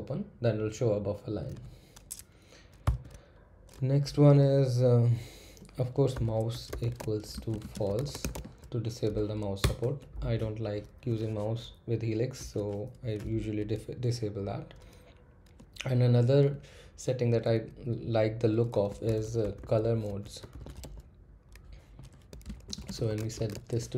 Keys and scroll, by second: 2.8 typing, 5.9-8.6 typing, 9.6 Return, 18.6-23.9 typing.